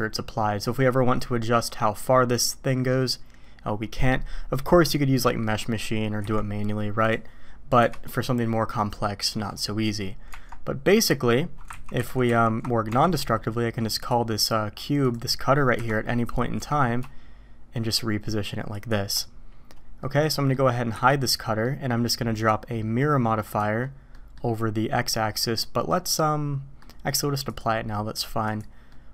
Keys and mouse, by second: 5.4 middle click, 6.2 y, 10.3 Tab, 11.7 ctrl+z, 11.9 ctrl+z, 12.3 ctrl+z, 12.9 Tab, 14.0-15.1 drag, 15.7 KP_1, 16.6 g, 20.0-20.5 drag, 20.9 h, 21.4 click, 22.4 click, 24.1 click, 25.1-26.8 middle drag, 27.6-28.6 drag, 28.9-29.1 middle drag.